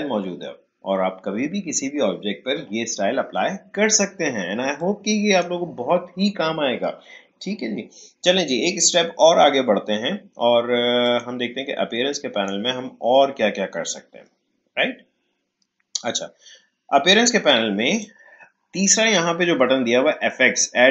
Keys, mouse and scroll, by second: 4.7-7.7 drag, 11.0 click, 17.4-20.4 drag.